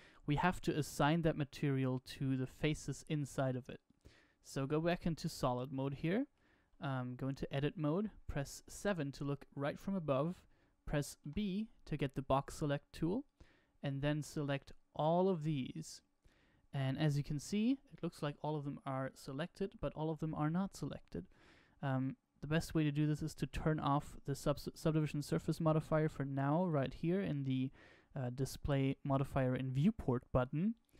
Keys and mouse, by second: 4.8-5.5 middle drag, 5.7-6.3 shift+middle drag, 7.1 Tab, 8.5 KP_7, 11.1 b, 16.8-20.2 middle drag, 22.9 click, 30.7 click.